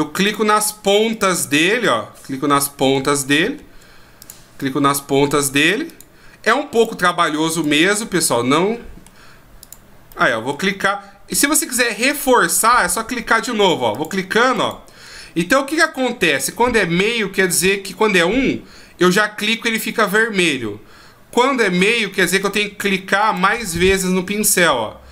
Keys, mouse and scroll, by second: 0.2 click, 1.1 click, 1.8 middle click, 3.0-4.2 shift+scroll up 10, 4.2 click, 4.6 middle click, 5.9 click, 6.7 click, 7.6 click, 8.0 middle click, 9.6 click, 10.1 middle click, 13.9 click, 14.5 click, 15.8 ctrl+z, 16.2 ctrl+z, 22.4 click, 23.2 click.